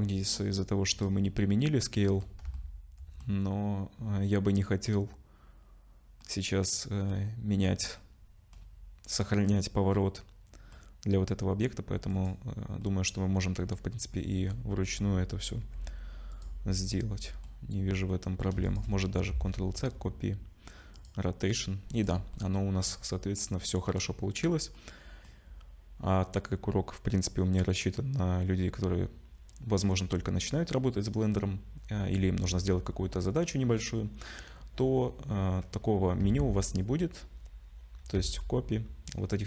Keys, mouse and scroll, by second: 1.2 middle click, 2.5 shift+middle click, 6.2 middle click, 8.0 middle click, 9.9 middle click, 12.1 click, 12.8 middle click, 15.6 g, 16.6-17.7 scroll up 3, 16.9 middle click, 17.7 scroll up 2, 18.1 middle click, 18.7 shift+click, 19.3 ctrl+c, 21.9 click, 22.3 middle click, 23.0-24.0 scroll down 3, 23.4 middle click, 24.7 middle click, 32.0-33.1 scroll down 2, 33.1-34.6 scroll up 2, 36.2 ctrl+c, 38.1 ctrl+c.